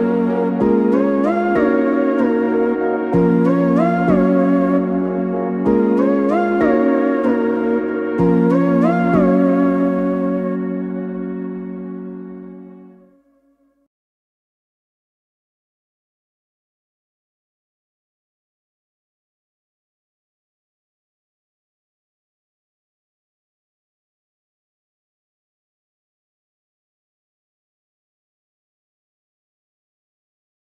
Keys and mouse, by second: 3.6 Tab, 5.5-8.6 drag, 12.8-22.1 ctrl+middle drag, 22.1-25.7 drag, 25.7-30.5 ctrl+middle drag, 30.5 shift+a.